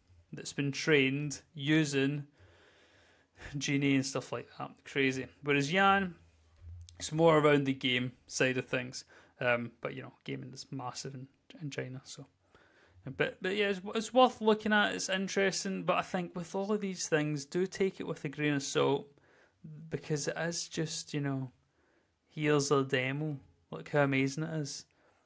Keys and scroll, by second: 5.8 w, 7.1-8.1 typing, 13.4-14.6 typing, 16.0 a, 16.7 w, 17.3 space, 18.4-21.9 typing, 18.6 Down.